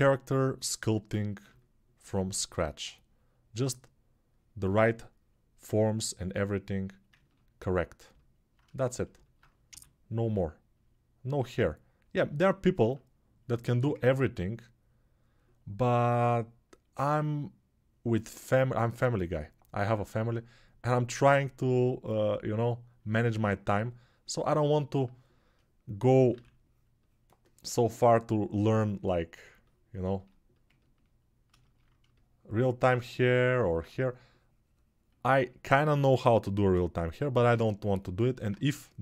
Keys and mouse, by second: 9.4 g, 31.5-39.0 alt+shift+drag.